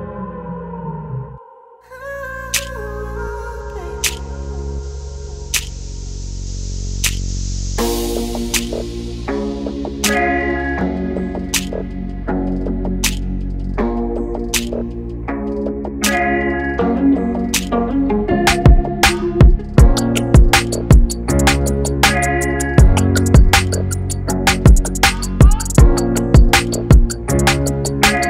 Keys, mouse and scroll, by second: 0.0 ctrl+v, 0.5 shift+Tab, 0.9 click, 3.1 click, 6.6 click, 8.9 Tab, 9.6 shift+Tab, 14.2 Tab, 15.0 shift+Tab, 16.2 click, 23.5 Tab, 25.2-28.2 drag.